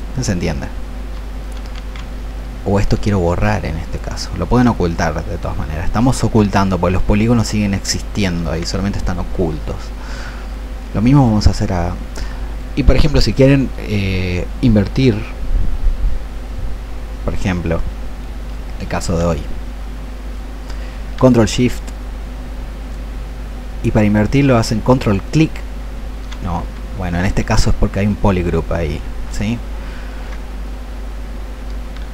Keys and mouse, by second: 1.6 ctrl+z, 3.4-13.9 ctrl+alt+shift+drag, 20.2 click, 21.7-23.1 ctrl+shift+drag, 26.7 ctrl+shift+z.